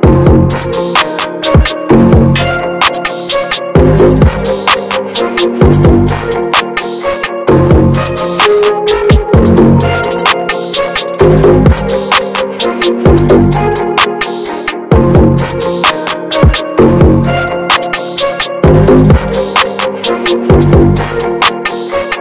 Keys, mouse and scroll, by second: 1.5 ctrl+z, 2.0-2.3 ctrl+scroll down 1, 2.6-6.0 drag, 6.0 scroll down 1, 6.1 middle click, 6.6 ctrl+z, 7.4-8.0 scroll down 1, 8.0-10.3 drag, 10.3 ctrl+z, 10.6 ctrl+scroll down 1, 11.3-12.9 drag, 12.9 ctrl+z, 13.4-13.7 ctrl+scroll down 1, 14.1-16.1 drag, 16.1-17.1 middle drag, 17.1 ctrl+z, 17.5-18.5 ctrl+drag, 18.5 ctrl+z, 19.5-20.6 scroll down 1, 20.6 scroll down 1, 20.7-22.2 drag.